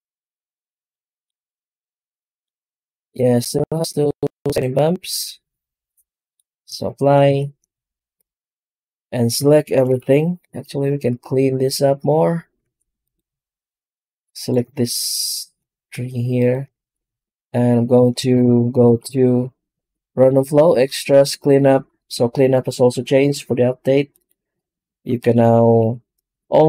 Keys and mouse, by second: 5.0-6.3 middle drag, 7.2 ctrl+a, 8.5-10.4 right drag, 10.4 Tab, 18.3 ctrl+space, 18.7 shift+q.